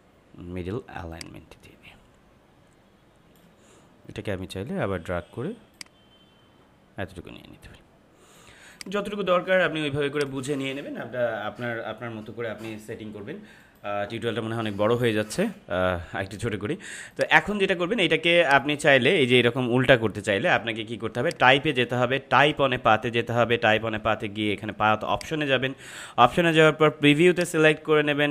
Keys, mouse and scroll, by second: 5.7-8.7 drag, 17.1 click, 21.2 click, 25.0 click.